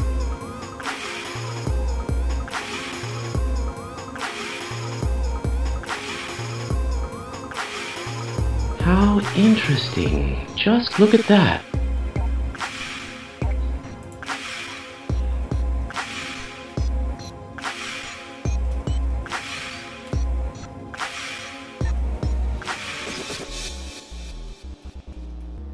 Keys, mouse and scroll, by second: 0.0 middle click, 1.0-3.3 shift+middle drag, 3.8 middle click, 7.9 middle click, 8.5 shift+middle click, 9.0 middle click, 11.2 Tab, 12.0 middle click, 12.6 middle click, 14.0 click, 15.1 middle click, 15.5-15.8 scroll down 2, 16.0 shift+middle click, 16.9 scroll up 1, 17.2-18.7 shift+middle drag, 18.8 middle click, 20.1 KP_Divide, 21.0 scroll down 1, 21.5 shift+middle click, 22.2-22.6 scroll down 2, 22.6 middle click, 23.1 shift+middle click, 23.9 shift+middle click, 24.8 middle click, 25.4-25.7 shift+middle drag.